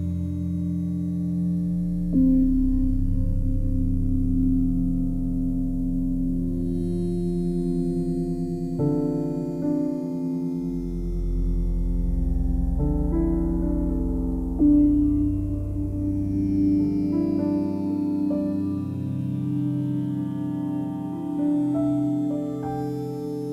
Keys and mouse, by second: 0.8 g, 0.9 g, 2.5 click, 3.7 ctrl+alt+click, 4.7 ctrl+alt+click, 6.3 g, 6.3 y, 7.1 click, 8.3-9.8 drag, 10.7 g, 10.8 g, 15.1 click, 17.0 alt+click, 17.9 ctrl+z, 18.8 alt+click, 19.7 alt+click, 21.6 s, 22.2 click, 23.4 g.